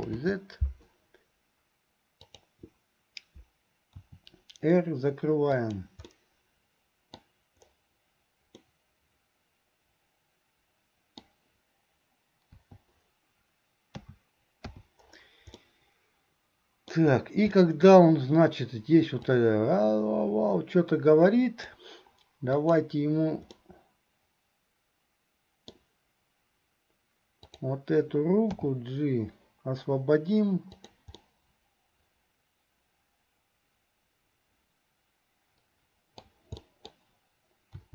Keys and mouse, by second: 0.2 ctrl+z, 4.0 r, 6.3-7.4 middle drag, 8.8-11.6 middle drag, 12.8 i, 14.1 a, 14.9 i, 15.8-17.1 middle drag, 17.7 middle click, 19.4-21.9 drag, 22.7 click, 23.7-26.0 middle drag, 31.4-36.0 middle drag, 36.0 click, 36.0 right click, 36.7 click, 36.7 right click.